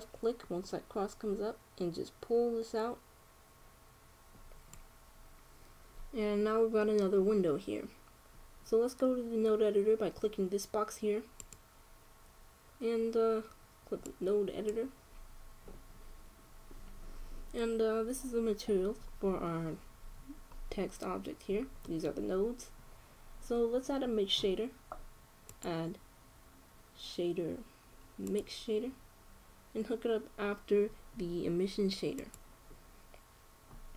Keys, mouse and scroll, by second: 0.6-2.4 drag, 12.1-13.8 drag, 18.8-24.4 middle drag, 26.2-28.0 drag.